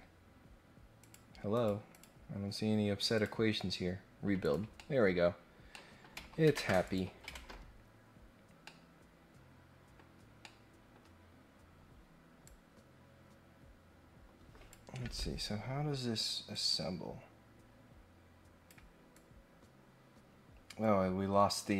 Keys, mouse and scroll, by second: 1.0 click, 1.5 click, 1.9 click, 3.1 click, 4.4 click, 4.7-5.2 scroll up 2, 5.3-5.7 scroll down 2, 5.7-6.0 scroll up 2, 6.8 click, 7.3 ctrl+Tab, 8.6-9.9 middle drag, 10.2 scroll down 1, 10.4 middle click, 11.3 scroll down 1, 11.5-12.0 scroll up 3, 12.4-14.7 drag, 16.5-18.6 drag, 19.1-21.7 drag.